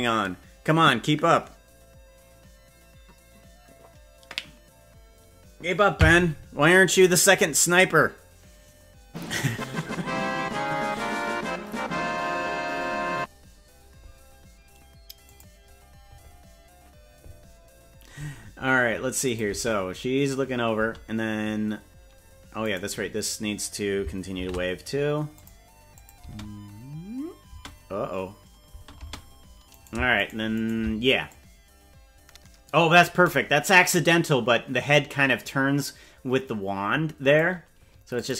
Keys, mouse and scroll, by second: 19.3 click, 19.5 space, 20.9 space, 22.7 right click, 24.3 shift+d, 26.0 click, 26.3 space, 27.5 space, 28.7 space, 29.1 space, 29.9 right click, 30.3 shift+right click, 30.7 right click, 31.3-33.1 drag, 33.3-37.4 drag, 38.2 click.